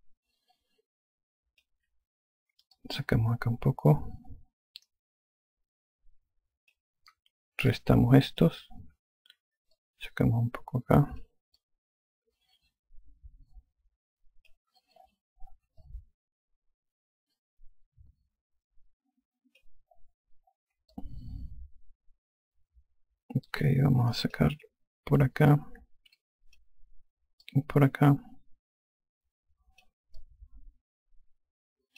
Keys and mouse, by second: 0.7 alt+click, 3.6 click, 8.6 ctrl+click, 10.6 click, 12.5 alt+click, 16.7 alt+click, 21.8 alt+click, 26.4 click, 28.3 click, 31.1 alt+click.